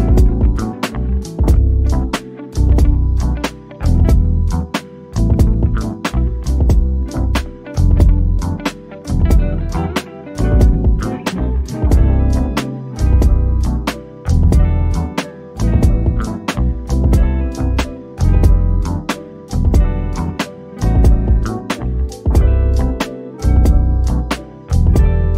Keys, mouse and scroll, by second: 1.4 middle click, 2.4 shift+click, 3.5 shift+click, 6.9 shift+click, 7.3 scroll down 1, 7.7-10.1 middle drag, 10.1 ctrl+shift+g, 12.4 click, 15.6 shift+click, 16.9 shift+click.